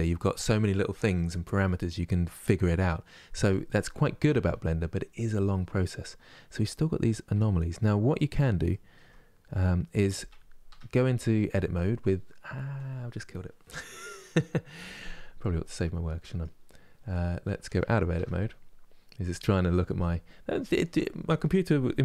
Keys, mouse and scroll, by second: 3.7 ctrl+space, 13.0 Tab, 15.1-18.9 middle drag, 18.9 Tab.